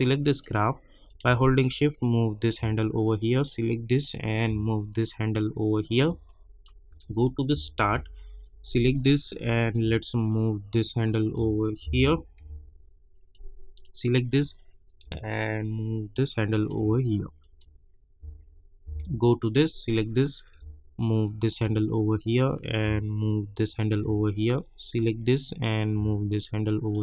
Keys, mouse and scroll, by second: 3.0-7.5 drag, 7.5 =, 7.7 =, 8.4-11.8 drag, 11.8 -, 12.4 -, 13.3-17.4 drag, 18.1 =, 18.8 =, 19.4-22.6 drag, 22.6-24.5 drag, 24.5-27.0 drag.